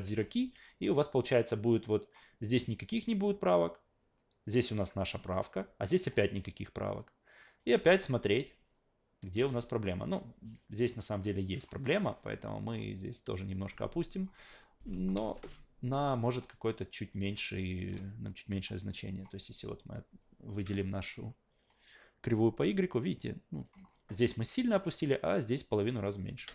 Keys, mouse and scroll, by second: 0.1 a, 0.6 alt+right click, 1.7 click, 2.9-5.0 drag, 5.5-7.7 drag, 7.8 alt+v, 9.4 alt+v, 9.6-11.6 drag, 13.7 click, 15.2 ctrl+z, 16.5 click, 17.9 a, 18.6 click, 20.2 drag, 20.6 f, 21.0 click, 23.8 alt+middle click.